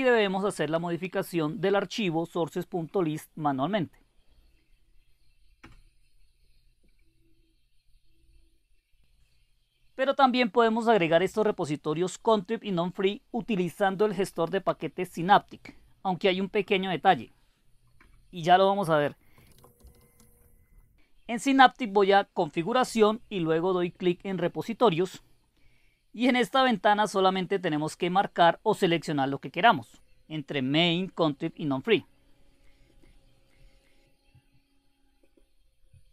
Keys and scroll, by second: 0.2 Return, 2.9 1, 5.6 Return, 16.0-17.5 typing, 18.0 Return, 19.1-20.5 typing.